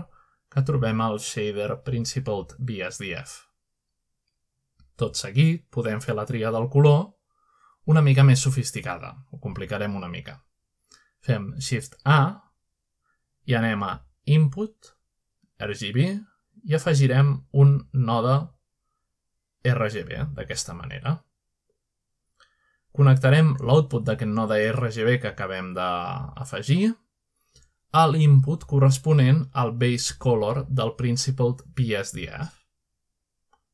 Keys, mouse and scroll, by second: 0.0 click, 0.7 click, 1.2 scroll down 2, 1.8 scroll up 2, 2.3 scroll down 2, 2.8 scroll up 2, 3.1 shift+middle click, 3.6 scroll up 2, 3.6 middle click, 3.8 middle drag, 4.5 click, 5.2-11.6 drag, 12.3-12.7 scroll down 2, 12.7-13.9 middle drag, 15.2 click, 19.7 click, 21.6 click, 21.9 scroll up 2, 22.3 middle click, 22.8-23.4 scroll up 2, 23.4 middle click, 24.6-31.5 drag, 33.2 middle click.